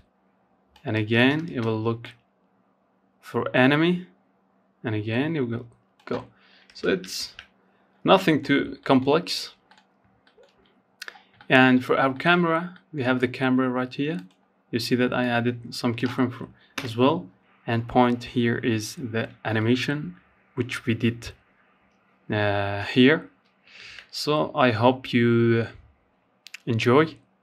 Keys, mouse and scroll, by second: 0.2-3.2 drag, 4.9 space, 5.4 ctrl+s, 5.7-6.4 scroll down 3, 6.4 shift+middle click, 6.6-7.0 scroll up 1, 7.0 shift+middle click, 7.2-8.2 scroll up 4, 7.8 middle click, 8.4 shift+middle click, 9.2-9.6 scroll down 1, 9.6 shift+middle click, 10.0-10.3 scroll down 1, 10.3-12.3 shift+middle drag, 12.3 click, 13.4-14.9 drag, 14.9 KP_0, 22.0 ctrl+s, 23.2-26.3 drag, 26.6 ctrl+s.